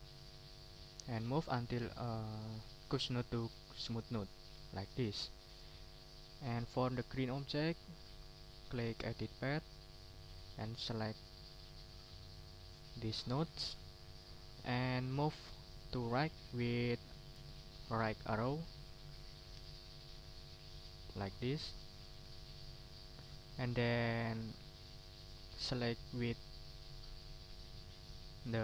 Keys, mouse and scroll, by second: 4.4 ctrl+scroll down 1, 5.1 ctrl+middle click, 5.7 ctrl+click, 6.5 middle click, 8.7 click, 10.5-13.2 drag, 15.3 middle click, 19.6 Right, 24.0 click, 24.8 click.